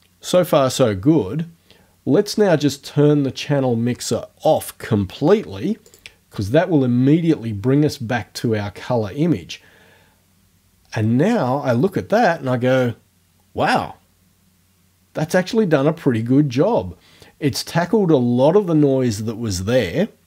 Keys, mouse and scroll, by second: 5.9 click.